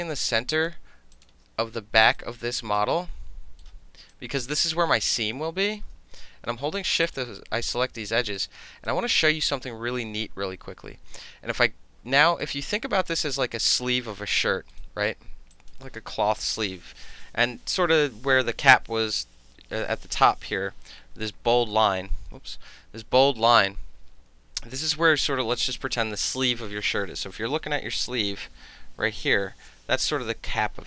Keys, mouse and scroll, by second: 0.5 shift+click, 0.7-1.1 shift+middle drag, 1.1 shift+click, 1.2-1.6 alt+shift+middle drag, 1.6-2.0 alt+scroll up 2, 2.0 alt+middle click, 2.2 alt+right click, 2.8 alt+middle click, 3.0-3.6 alt+scroll up 2, 3.6 alt+middle click, 4.1 alt+click, 4.7 alt+middle click, 5.8-7.0 alt+shift+middle drag, 7.0 shift+click, 7.1-8.4 shift+middle drag, 8.4 alt+right click, 8.9 alt+middle click, 9.6 alt+right click, 12.4 alt+right click, 12.4 alt+click, 12.7 alt+middle click, 13.1 alt+middle click, 13.3 alt+click, 13.6-14.7 alt+middle drag, 14.8 alt+click, 15.5 alt+click, 22.1 Caps_Lock, 25.8 middle click, 26.0 middle click, 26.2 middle click.